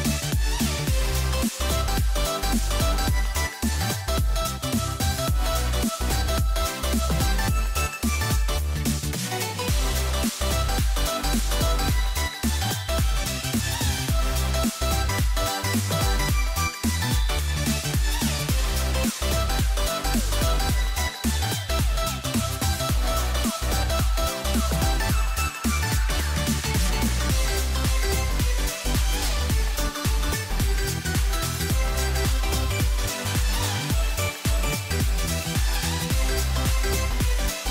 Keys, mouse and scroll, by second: 6.2 g, 10.9 o, 13.5-16.1 middle drag, 16.1 ctrl+z, 18.9 g, 21.8-24.7 scroll down 5, 24.7 scroll down 1, 24.9-27.9 middle drag, 27.9 c, 31.0-34.2 scroll up 3, 34.2-37.6 middle drag, 37.6 ctrl+r.